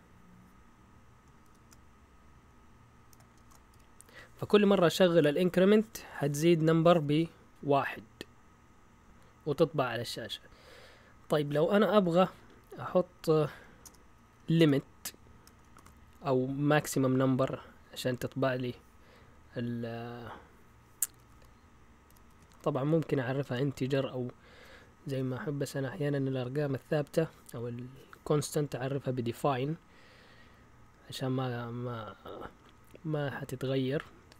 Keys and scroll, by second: 1.4 typing, 3.1-5.2 typing, 12.2 Up, 12.3 Up, 12.4 Up, 12.6 Up, 12.7 Up, 12.9 Up, 13.0 Up, 13.1 Up, 13.5 Up, 13.8 Return, 14.2 Up, 14.6 Return, 15.4-15.8 typing, 20.9-23.4 typing.